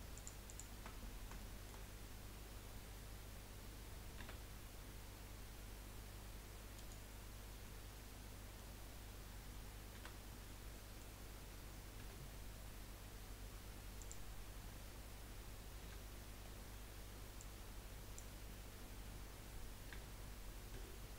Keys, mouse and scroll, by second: 0.1 alt+shift+click, 0.4 alt+shift+click, 1.4 shift+middle click, 1.8-2.4 scroll up 1, 2.4-4.2 scroll up 1, 4.2 g, 7.6-9.9 middle drag, 9.9 a, 10.4-10.7 scroll down 1, 10.7 middle click, 11.2-12.0 scroll up 1, 12.0 g, 15.8 1, 16.4-17.4 scroll down 2, 17.4 click, 19.9 g.